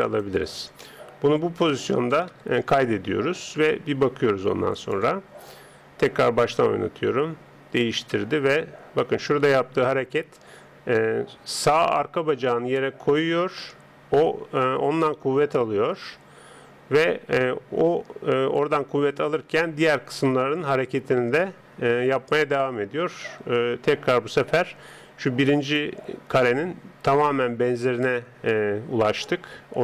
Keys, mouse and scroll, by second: 0.8-2.3 middle drag, 2.3 KP_3, 4.8-7.8 drag.